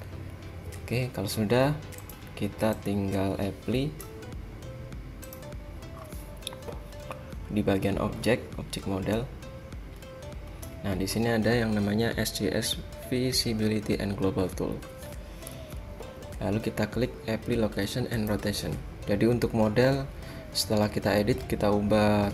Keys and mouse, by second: 2.2-4.8 drag, 5.4-8.2 drag, 9.4-13.3 drag, 15.6 a, 18.3-22.3 drag.